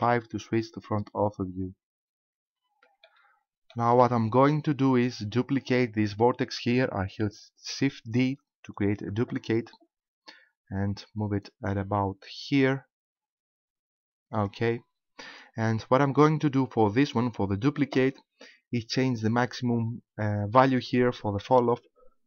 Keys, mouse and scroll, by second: 2.5 scroll down 1, 3.1 shift+middle click, 8.3 shift+d, 14.5 ctrl+click, 21.5 click.